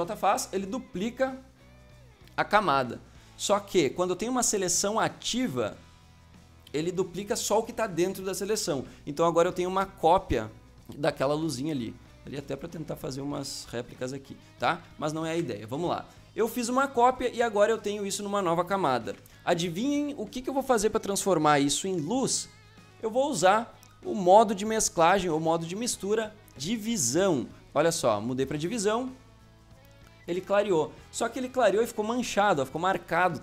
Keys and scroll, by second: 8.5 v, 15.2 ctrl+z, 19.0 ctrl+z, 30.2 Return, 31.5 ctrl+space, 32.5 ctrl+space.